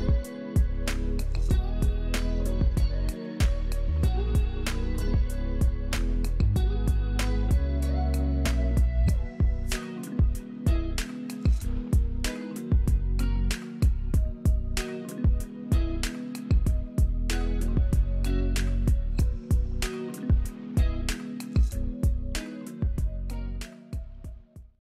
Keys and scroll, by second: 0.9 space, 2.2 space, 2.9 alt+space, 3.4 alt+space, 6.0 F11, 6.5 space, 8.4 alt+space, 9.6 ctrl+z, 10.0 space, 10.9 alt+space, 11.4 alt+space, 14.8-15.8 typing, 17.2 typing, 18.8 space, 19.4 ctrl+KP_0, 20.1 alt+space.